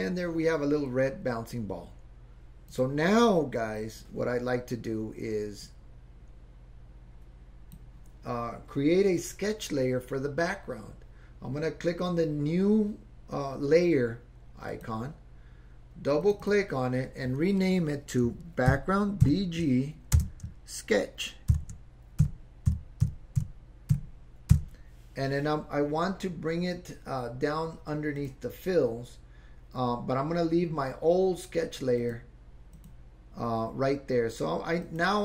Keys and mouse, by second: 2.7 click, 5.7-7.8 drag, 14.7 click, 16.2 click, 16.4-25.7 drag, 28.2 click, 32.0 click, 32.7 click, 34.8 click.